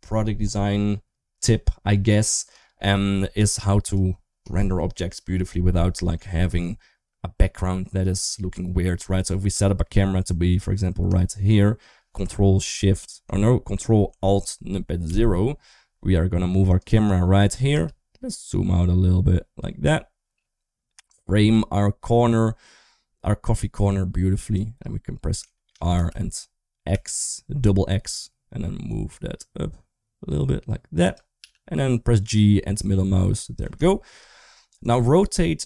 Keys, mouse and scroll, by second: 2.5 shift+middle drag, 3.2 s, 9.5 shift+middle drag, 9.8-10.4 middle drag, 11.1-11.4 shift+middle drag, 14.9 ctrl+alt+KP_0, 17.6 g, 23.9 click, 25.4 shift+middle click, 25.7 r, 31.3 g, 33.7-34.0 shift+middle drag, 34.0 scroll down 1, 34.7 click.